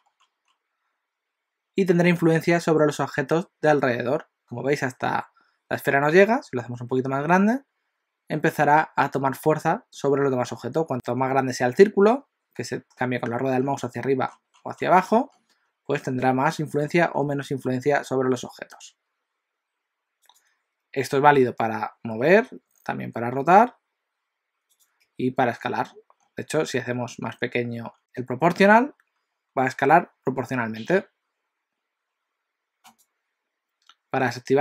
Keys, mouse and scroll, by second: 22.3 r, 25.1 s.